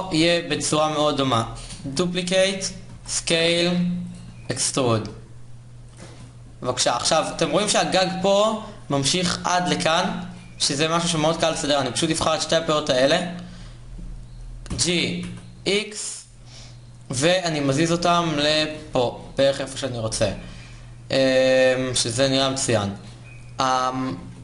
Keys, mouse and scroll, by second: 0.5-1.6 drag, 1.6 shift+d, 2.6 s, 3.9 e, 5.7 Tab, 10.4 Tab, 14.3 g, 18.5 Tab, 22.4 Tab.